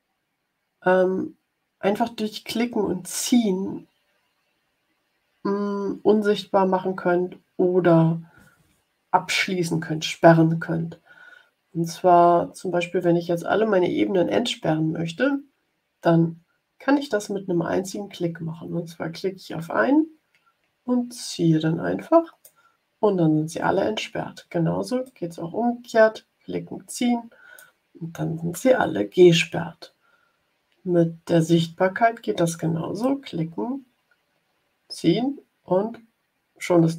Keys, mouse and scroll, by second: 19.5-22.5 drag, 24.9-27.7 drag, 32.9-36.9 drag.